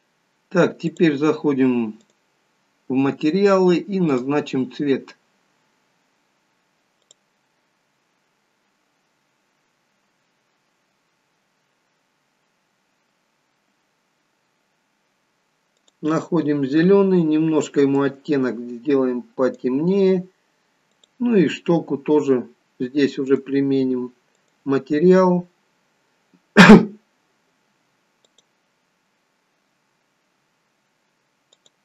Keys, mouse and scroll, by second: 1.0 click, 2.1 click, 21.4 click, 23.4 click, 30.0 click, 30.0-31.6 scroll up 3, 31.6 click.